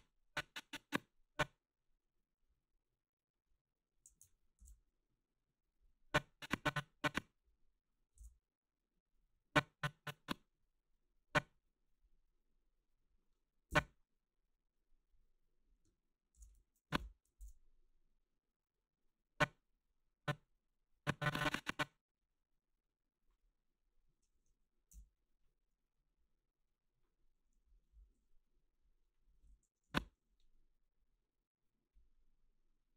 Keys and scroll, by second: 4.6 ctrl+c, 8.2 ctrl+v, 13.7 Left, 16.3 ctrl+c, 16.9 Right, 17.4 ctrl+v, 24.9 Delete, 29.9 Right.